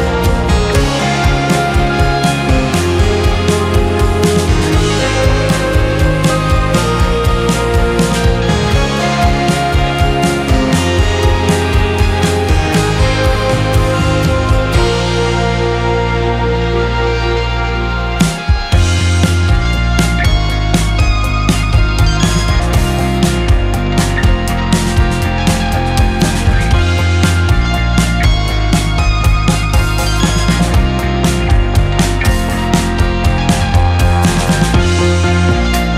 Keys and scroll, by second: 9.2-10.0 typing, 18.5-20.1 typing, 20.4 Return, 30.6-31.9 typing.